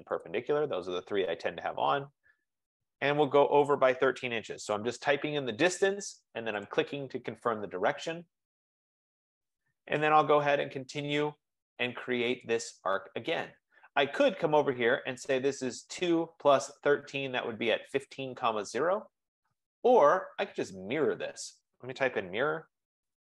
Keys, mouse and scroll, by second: 0.7 click, 2.8 click, 3.8-4.9 typing, 5.0 Return, 6.8 click, 10.8 Return, 12.6 click, 16.4-17.6 drag, 22.0-23.3 typing.